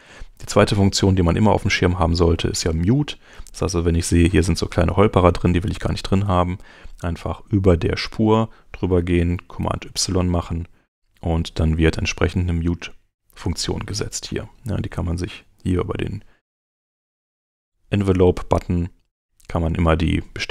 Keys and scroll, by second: 9.3 super+y.